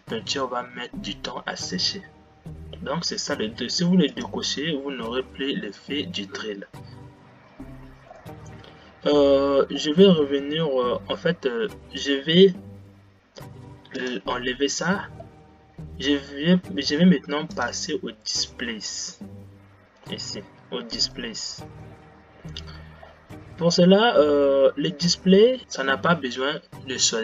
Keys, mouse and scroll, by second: 21.6 click.